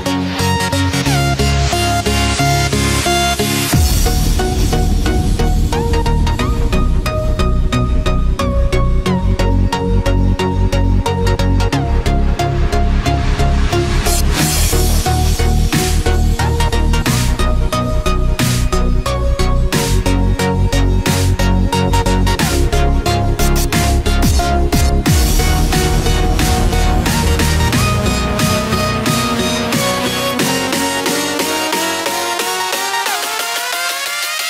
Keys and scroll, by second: 11.8 ctrl+z, 33.3 ctrl+j, 34.0 ctrl+=.